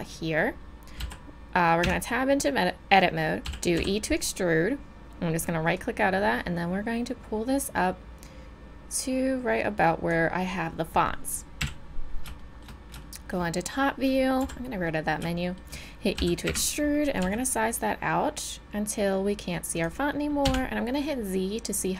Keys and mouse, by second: 1.0 e, 1.8 Tab, 3.4 e, 3.6 g, 3.8 e, 4.9 click, 5.8-7.7 drag, 11.6 KP_7, 12.4-14.4 middle drag, 14.4 n, 15.0-16.2 middle drag, 16.2 e, 17.2 s, 20.4 z.